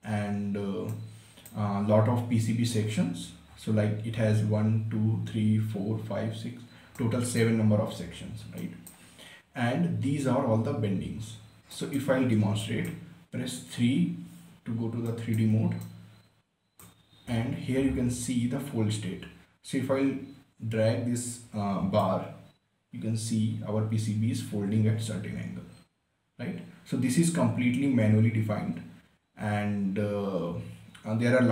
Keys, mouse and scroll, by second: 0.6-1.5 scroll up 1, 1.5-3.2 right drag, 3.2 scroll up 1, 4.1 scroll down 1, 7.6-9.2 right drag, 12.3 right click, 12.9-13.2 scroll down 1, 13.2 right click, 14.4 3, 15.7-20.1 right drag, 22.7-31.5 drag.